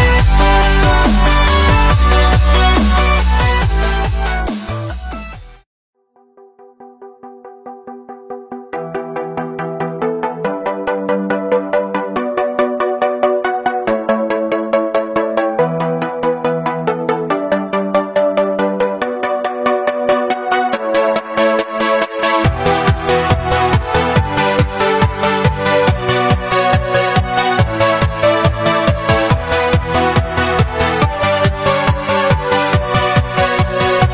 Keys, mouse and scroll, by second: 0.1-0.8 drag, 6.4 scroll up 3, 6.7 shift+middle drag, 6.9 scroll down 1, 7.0-7.3 middle drag, 7.3 click, 8.1 click, 11.4 click, 13.0-13.4 scroll up 1, 13.4 scroll down 1, 14.5 scroll up 4, 15.1 click, 15.7-17.4 drag, 17.4-19.5 drag, 19.5-20.2 scroll up 11, 21.5-23.1 scroll down 11, 23.1 click, 23.4 scroll up 2, 24.0 scroll up 2, 25.1 click, 25.9-28.3 drag, 28.7-29.2 drag, 30.9 click, 31.1-31.5 scroll down 3, 31.5 middle click, 32.1-33.9 scroll down 6, 33.9-34.1 drag.